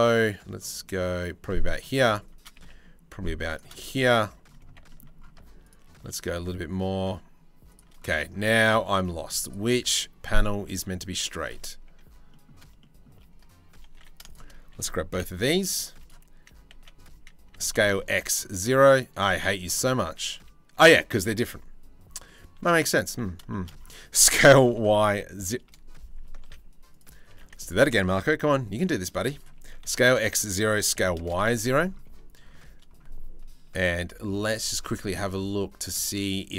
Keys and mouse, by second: 2.2 g, 4.5 middle click, 5.3 shift+middle click, 5.8 g, 8.3 click, 9.3 click, 9.3 z, 10.1 shift+middle click, 10.4 click, 11.5 ctrl+z, 11.9 click, 12.4 shift+middle click, 13.6 2, 14.7 KP_7, 15.3 z, 16.3 z, 17.1 s, 23.1 shift+right click, 23.8 s, 26.1 ctrl+z, 26.5 click, 27.0 1, 28.1 c, 29.2 s, 30.3 s, 36.4 middle click.